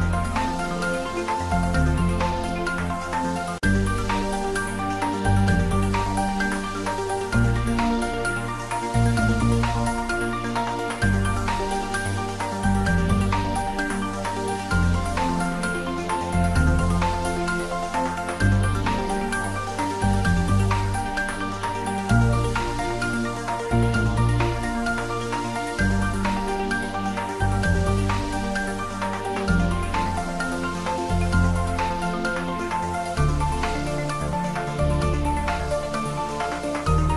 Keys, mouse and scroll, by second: 0.2 click, 0.6 s, 1.5 y, 3.2 click, 3.8 g, 5.0 click, 5.6 s, 6.3 click, 8.2 shift+z, 8.9-10.0 middle drag, 10.0 click, 14.3 g, 15.4 click, 15.5 shift+z, 16.2 `, 16.4 3, 17.0-17.7 scroll down 1, 17.7 click, 18.4 scroll up 1, 19.4 shift+z, 20.3 g, 20.6 z, 22.5 click, 23.1 Tab, 23.2-23.7 typing, 26.1 click, 26.8 Tab, 27.5-27.9 scroll down 1, 27.9 middle click, 28.8 shift+z, 29.7 click, 31.4 click, 32.7 Tab, 33.1 click, 33.9 2, 34.3 click, 35.5 shift+click, 36.1 ctrl+z, 36.8 shift+click.